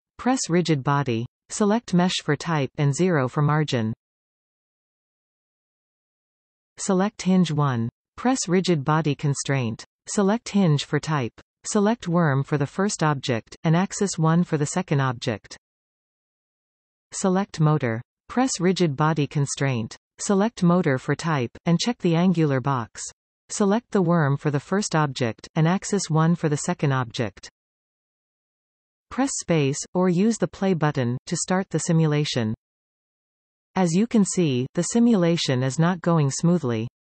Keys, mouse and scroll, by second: 0.0 click, 1.2-6.4 drag, 4.1 Return, 7.6 click, 8.6-11.2 drag, 12.8 click, 15.4 click, 16.6 click, 17.3-21.7 drag, 22.8 click, 24.3 click, 26.7-27.6 scroll down 1, 27.6 space, 31.0 click, 32.4 click, 34.5 click, 35.2 click, 36.0 click, 36.5 click.